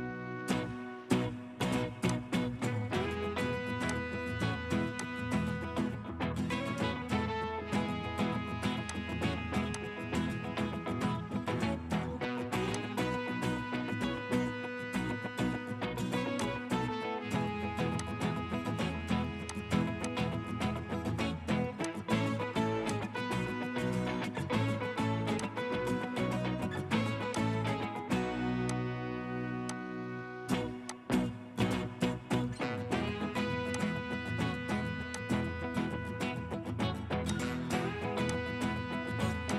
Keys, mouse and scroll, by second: 6.2-6.5 typing, 6.8 Return, 11.5 typing, 11.9 Return, 14.4 Escape, 14.6 Escape, 16.4 ctrl+click, 18.0 ctrl+click, 23.7-24.1 scroll up 1.